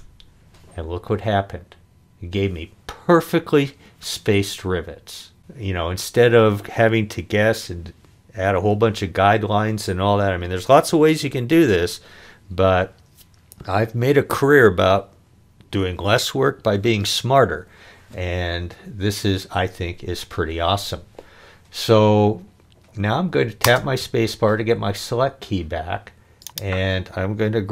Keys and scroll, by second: 23.6 space.